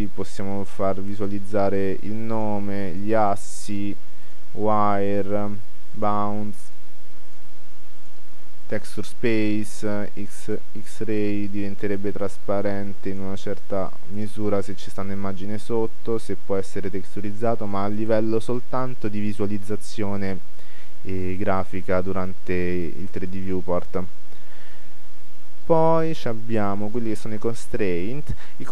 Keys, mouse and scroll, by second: 1.3-17.4 drag, 20.9-23.7 middle drag, 23.9 middle click, 24.8 middle click, 25.9-28.7 middle drag.